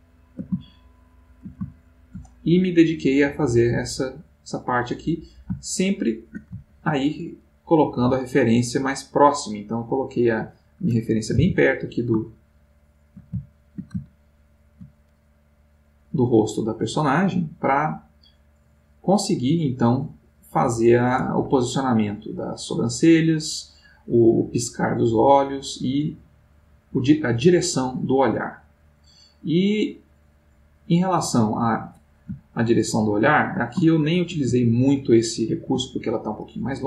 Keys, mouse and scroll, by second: 3.6-5.7 drag, 5.7-7.1 shift+middle drag, 11.4 g, 12.0 click, 12.5-15.5 ctrl+middle drag, 18.1 click, 20.3 click, 21.8-32.1 drag, 32.5-34.4 ctrl+middle drag, 34.9-36.0 ctrl+middle drag.